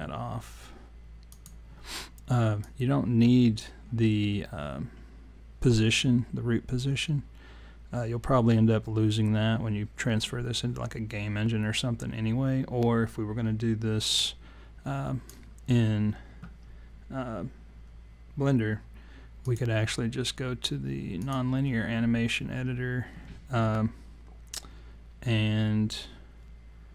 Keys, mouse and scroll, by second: 1.3 click, 2.7 click, 19.4 click.